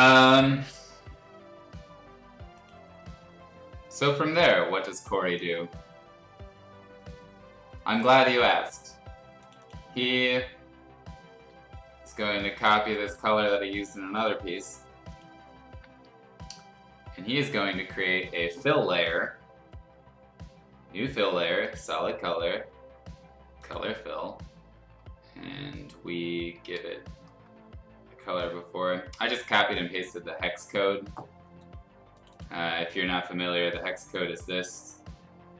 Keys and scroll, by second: 12.5 ctrl+c, 12.8 ctrl+c, 13.0 ctrl+c, 26.6 ctrl+v.